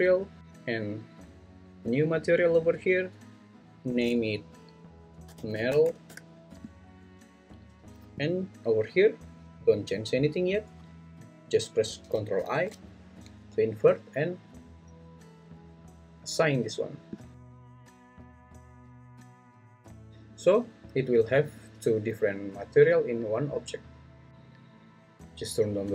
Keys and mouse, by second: 1.9 click, 3.9-6.1 drag, 16.6 click.